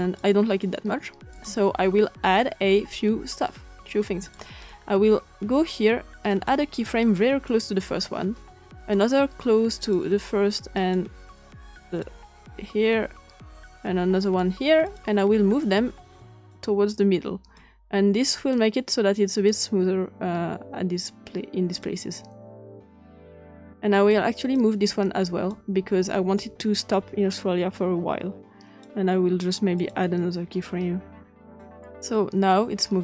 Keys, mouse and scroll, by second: 1.3-2.3 drag, 4.2 click, 6.2 click, 7.4 click, 8.7 click, 9.7 click, 10.7 click, 11.1 click, 11.8 click, 13.6 click, 14.8 click, 15.6 click, 17.5-18.5 drag, 19.4-21.8 drag, 23.3 click, 24.5-25.5 drag, 26.3-28.8 drag, 29.7 click, 31.5 click.